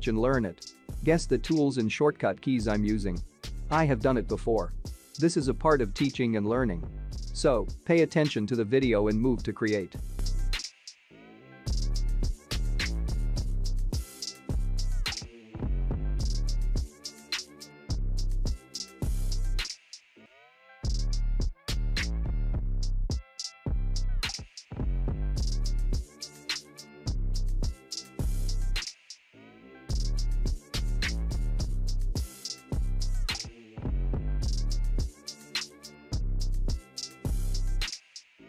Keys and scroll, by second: 2.2 ctrl+t, 14.9 ctrl+g.